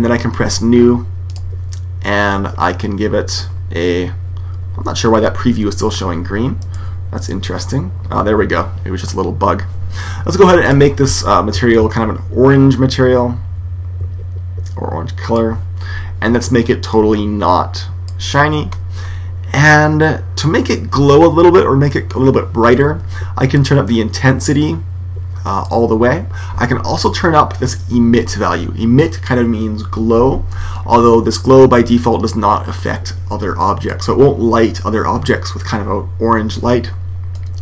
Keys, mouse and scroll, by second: 6.5 right click, 10.6 click, 16.8 click, 18.8-20.9 middle drag, 23.5 click, 30.7 click, 37.3 click.